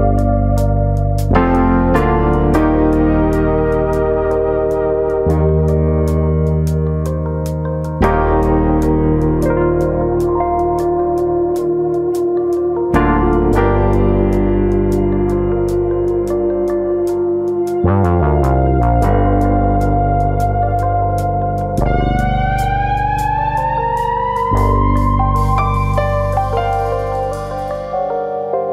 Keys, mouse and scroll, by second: 0.0 click, 0.2 g, 0.8 click, 1.2 click, 1.4 g, 2.0 click, 2.4 click, 2.6 g, 3.1 click, 3.3 middle click, 4.2 click, 4.5 shift+click, 4.8 shift+click, 5.3 g, 6.1 click, 6.4 click, 6.6 shift+click, 6.6 g, 7.6 click, 7.8-8.5 scroll down 3, 8.0 middle click, 8.5 Tab, 8.8 scroll down 1, 8.9 middle click, 10.1-10.8 scroll up 6, 10.3 middle click, 11.0 middle click, 11.2 scroll down 2, 11.4 shift+middle click, 12.2 click, 13.3 ctrl+z, 13.6 middle click, 14.6 middle click, 14.8 shift+middle click, 15.0 shift+middle click, 15.0-15.6 scroll up 2, 15.2 Tab, 15.9 click, 16.1 middle click, 17.0 click, 18.5 click, 18.8 shift+middle click, 19.1 middle click, 19.7 shift+middle click, 20.0 middle click, 20.9 click, 21.2 middle click, 21.9 click, 24.4 shift+middle click, 24.7 middle click, 25.1 shift+middle click, 25.6 click, 26.5 click, 27.5 middle click, 28.2 shift+middle click, 28.6 shift+middle click.